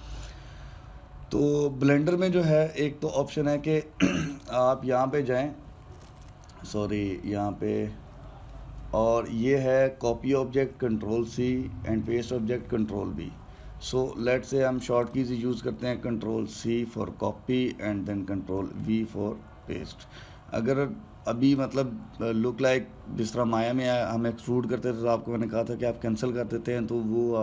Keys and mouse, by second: 5.1-8.1 drag, 14.9 click, 15.7 click, 17.2 ctrl+c, 19.3 ctrl+v, 22.2 click.